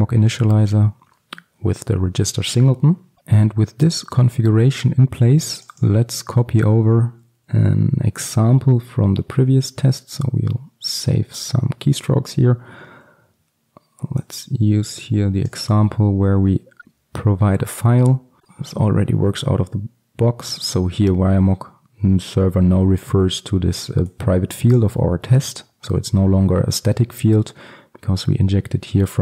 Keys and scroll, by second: 3.8 alt+1, 5.9 alt+1, 15.8 ctrl+c, 16.8 ctrl+v.